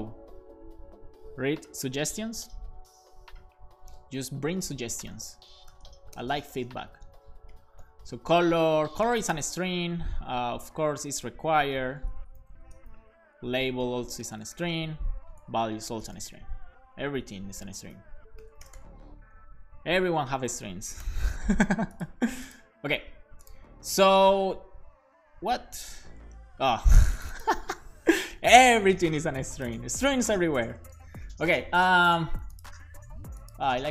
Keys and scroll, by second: 4.9-6.4 typing, 7.0 super+v, 7.5 ., 8.7-11.7 typing, 11.4 Return, 12.1 shift+super+Left, 12.3 super+c, 12.5 Right, 12.8 Return, 13.6 super+Left, 14.0-15.0 typing, 15.2 super+Right, 15.4 shift+super+Left, 15.6 super+c, 15.7 Right, 16.0 Return, 16.2 super+v, 16.7 super+Left, 17.1 alt+shift+Right, 17.7-19.3 typing, 21.0 alt+shift+f, 21.3 super+s, 27.7-28.9 typing.